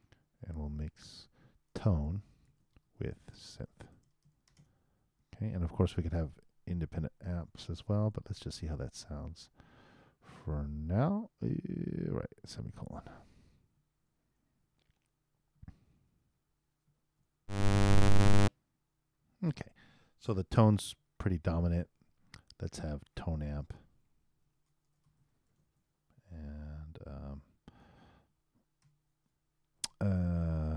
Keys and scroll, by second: 8.1 super+Return, 13.7 super+;, 14.3 super+Return, 16.0 super+Return, 17.4 super+Return, 20.9 super+., 24.4 shift+8, 24.8 shift+t, 28.8 shift+8.